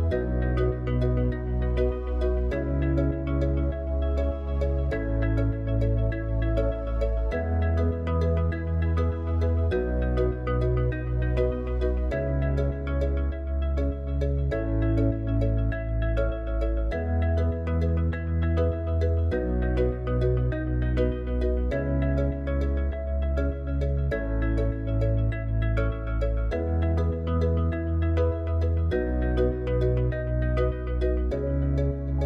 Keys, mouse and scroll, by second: 10.9 click, 12.7 s, 16.3 middle click, 16.5-16.9 middle drag, 18.1 s, 20.0 g, 23.9 ctrl+a, 25.7 KP_7, 27.7 g, 30.1 KP_1.